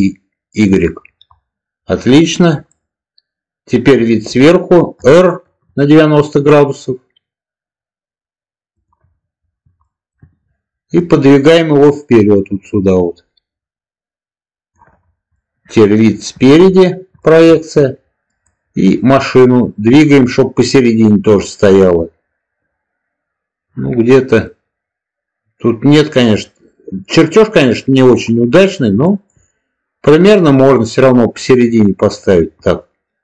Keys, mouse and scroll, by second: 0.6 click, 2.6-4.2 middle drag, 4.9 r, 8.6 ctrl+click, 9.7 shift+middle drag, 10.9-14.6 drag, 15.3-16.5 middle drag, 17.1 shift+middle drag, 18.4-28.1 drag, 29.1 shift+middle click, 33.1 g.